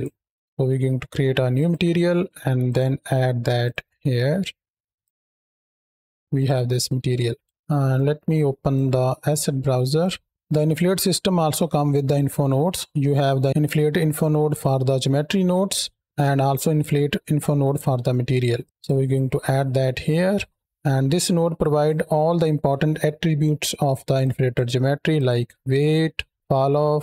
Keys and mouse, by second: 1.4 click, 2.6 click, 4.9 click, 5.0 KP_7, 5.7 z, 6.2 click, 6.6 click, 7.7 click, 18.4 click, 19.9 click, 20.9 click, 21.9 middle click, 24.0 click, 25.0 ctrl+shift+click, 26.3 ctrl+shift+click.